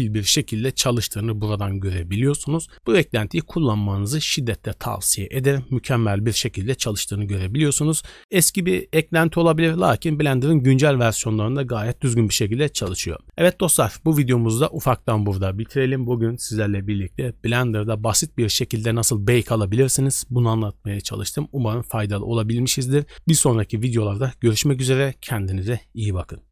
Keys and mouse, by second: 14.5 drag.